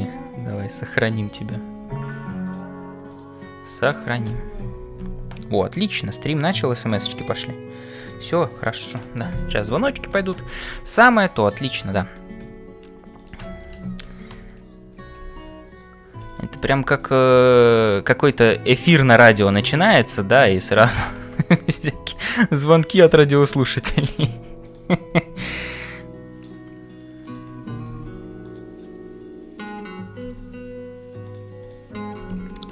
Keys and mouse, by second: 0.7 click, 10.9 middle click, 13.1 click, 17.6 click, 21.0 click, 22.2-23.2 middle drag, 24.7 click, 25.2 f, 25.7 middle click, 27.8 g, 29.6 click, 31.7 click, 32.3 f, 32.4 f.